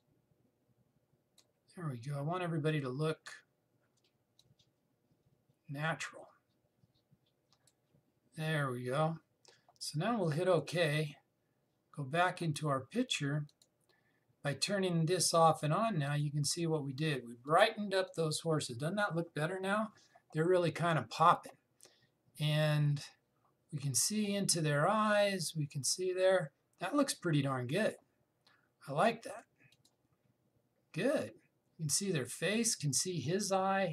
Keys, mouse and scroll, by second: 5.1-11.3 drag, 14.2 click, 21.4 click, 29.9 click.